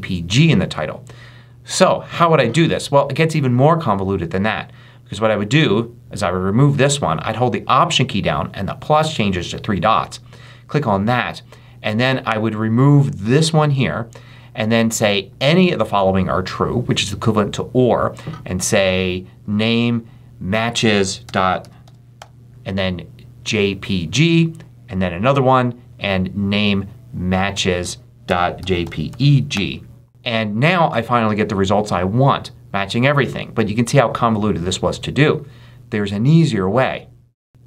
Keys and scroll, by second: 20.9-22.6 typing, 27.9-29.9 typing.